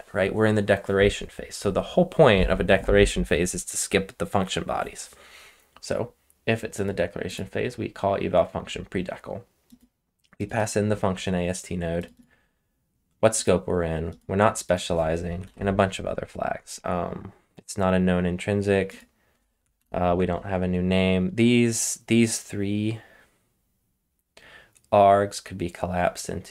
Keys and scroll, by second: 15.4 super+p, 19.7 super+p.